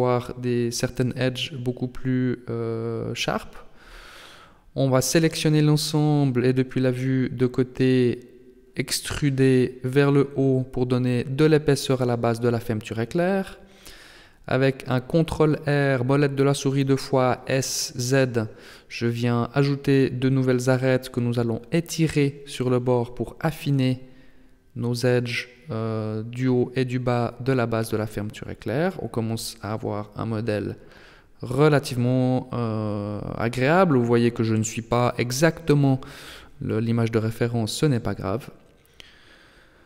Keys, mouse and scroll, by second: 0.6 Tab, 3.0 Tab, 3.2 a, 3.4 a, 5.2 KP_1, 7.9 e, 13.9 middle click, 14.8-16.2 scroll up 5, 16.2 ctrl+r, 26.5 Tab, 27.2 middle click, 31.3 KP_7, 33.8 Tab, 37.0 click, 38.6 a, 38.8 a.